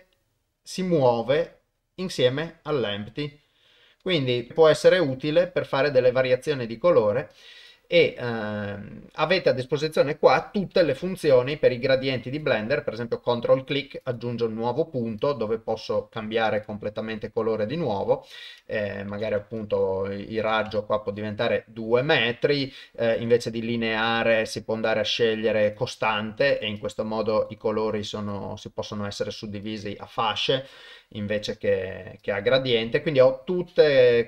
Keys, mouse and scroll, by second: 4.5 ctrl+Tab, 4.6 click, 5.0 click, 7.3 click, 11.7 click, 14.0 click, 18.4 click, 19.6 click, 20.4 click, 23.1-25.7 drag, 26.8-27.5 drag, 28.3-29.3 drag, 29.7-30.2 drag, 32.2 click.